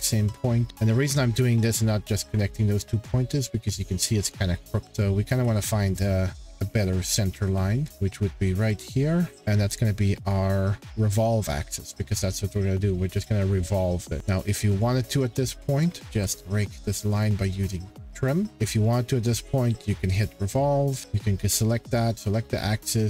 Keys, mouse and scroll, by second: 2.5 click, 2.5 scroll, 4.8-5.3 scroll, 5.4 t, 6.0 click, 6.2 scroll down 1, 6.5 Escape, 6.8-7.4 scroll, 9.3 click, 9.3 middle click, 10.3 click, 10.8 Escape, 11.6 middle click, 11.7-12.1 scroll, 13.2 click, 14.2 scroll, 15.1 scroll, 15.8 click, 16.1 t, 17.2 click, 17.8 Escape, 18.5 click, 20.1 click, 20.9 scroll, 21.1 click, 22.1 click.